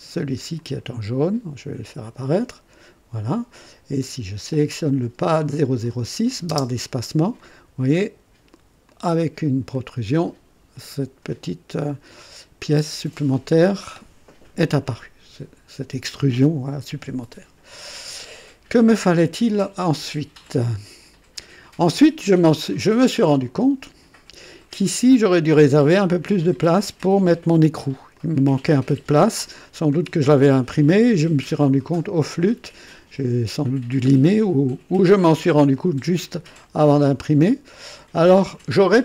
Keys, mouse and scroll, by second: 0.6-1.7 drag, 5.8 click, 6.5 space, 7.4-8.7 drag, 8.9-11.0 drag, 12.1-14.2 drag, 22.3 click, 23.3-25.3 drag, 26.4 click, 28.1 click, 29.7 scroll down 2, 30.2 click, 31.7-32.3 scroll up 3, 32.3 right click, 34.3-35.6 drag, 35.8 right click, 36.5-38.4 drag.